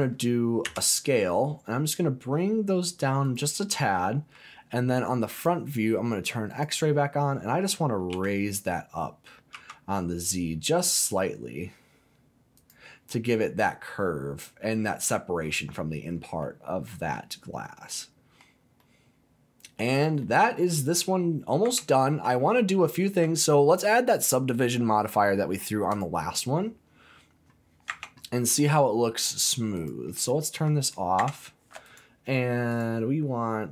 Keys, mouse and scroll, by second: 0.6 s, 3.2 click, 3.7 middle click, 3.7-4.4 scroll down 1, 5.3 click, 6.5 click, 8.1 g, 9.5 z, 12.5 click, 13.1-16.2 middle drag, 16.4 middle click, 17.6-17.9 scroll down 2, 17.9 middle click, 18.8 middle click, 19.9 click, 20.2 middle click, 21.6 Tab, 22.7 shift+middle click, 23.3 middle click, 24.2-26.5 drag, 27.9 Tab, 28.3 middle click, 29.7 click, 30.3 middle click, 31.2 Tab, 31.8 right click, 32.7 click.